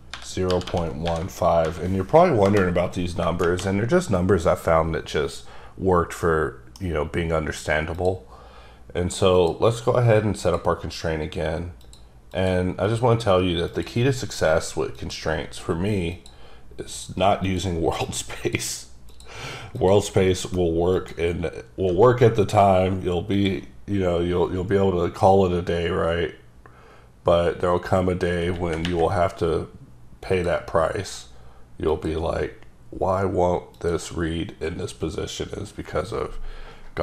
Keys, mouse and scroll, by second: 0.0-2.1 typing, 2.4 Return, 6.2 middle click, 7.9 click, 9.4 click, 11.8 click, 12.3 click, 13.1 click, 13.8 click, 15.1 click, 16.9 click, 17.5 click, 18.1 click, 19.1 click, 19.7 click, 20.9 click, 23.4 click, 30.3 click, 31.9 click, 33.7 click.